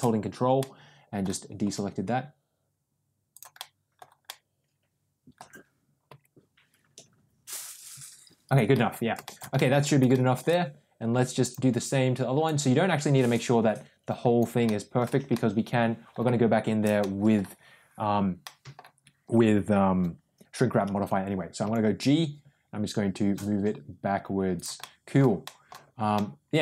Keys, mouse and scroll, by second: 0.5 middle click, 1.5 g, 3.5 middle click, 4.1-5.3 middle drag, 6.0 g, 8.6 middle click, 9.1 middle click, 9.5 middle click, 10.0 shift+middle click, 11.3 click, 12.3-14.3 drag, 14.5 middle click, 15.2 middle click, 16.9 middle click, 18.3 middle click, 21.5 g, 24.7 middle click, 25.4 middle click, 26.1 middle click.